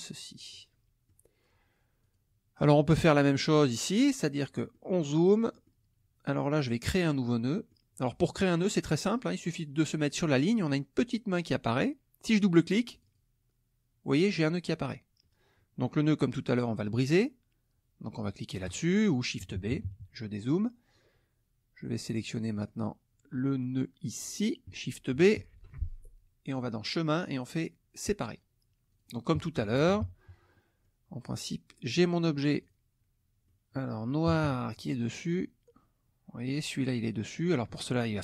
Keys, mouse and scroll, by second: 0.5 middle click, 2.0 click, 4.1-5.3 middle drag, 5.5 middle click, 7.6 middle click, 12.9 click, 18.7 click, 19.4 KP_Subtract, 22.2 middle click, 23.4 middle click, 24.3 click, 25.5 shift+b, 26.5 click, 28.3 click, 28.9 click, 29.5 KP_Subtract, 30.5 middle click, 32.0 click, 32.6 click, 33.5 middle click, 33.5-34.0 scroll up 1, 34.3 KP_Subtract, 35.0 middle click, 35.0-35.5 scroll up 1, 36.5 click.